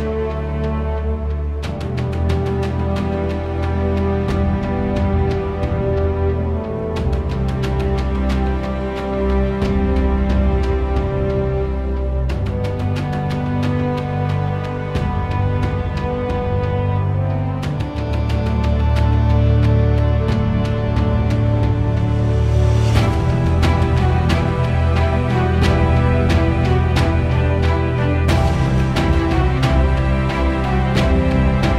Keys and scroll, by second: 11.2 -, 12.8 1, 13.3 5, 13.7 Return, 22.6 5, 23.5 Return, 26.9 1, 27.3 0, 27.6 Return, 30.3 1, 31.4 5.